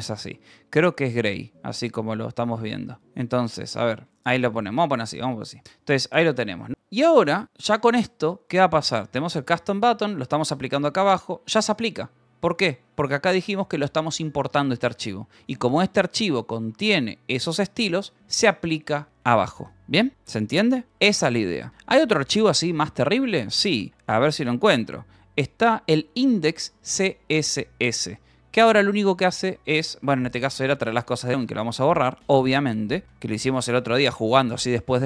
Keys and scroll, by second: 0.0-8.5 typing, 4.0 Escape, 5.5 Return, 10.6 shift+v, 10.7 Escape, 12.5 g, 13.0 j, 13.8 shift+v, 14.2 Escape, 15.5 Escape, 18.8 Escape, 22.0-24.9 typing, 25.7 ctrl+n, 26.6 Return, 27.2-31.6 typing, 32.3 Escape, 33.0-35.0 typing.